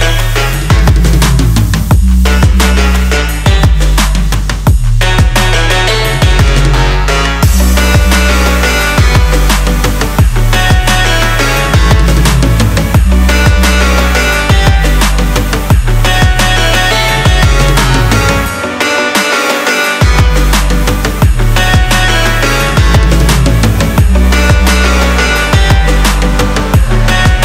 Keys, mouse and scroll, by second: 1.1 click, 27.3 o.